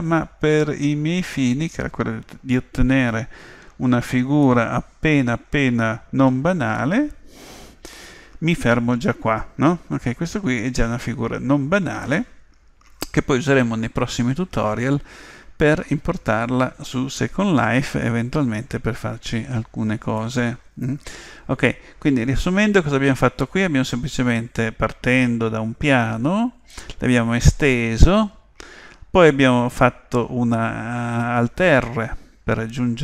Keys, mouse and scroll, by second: 1.3-6.4 middle drag, 6.8-8.7 middle drag, 20.2-22.1 middle drag.